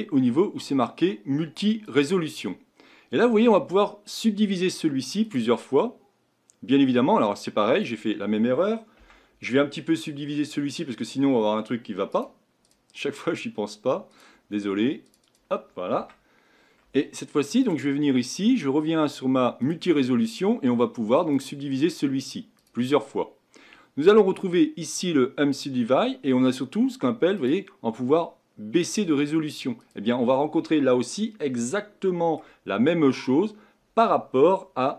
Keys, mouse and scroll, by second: 2.3 click, 4.3-9.2 drag, 9.2 Tab, 12.3-14.3 right drag, 14.3-16.2 drag, 16.2 Tab, 17.9 click, 19.9-21.0 drag, 21.4-26.0 drag, 27.6-31.4 drag, 31.4 scroll down 2, 31.9-34.9 middle drag.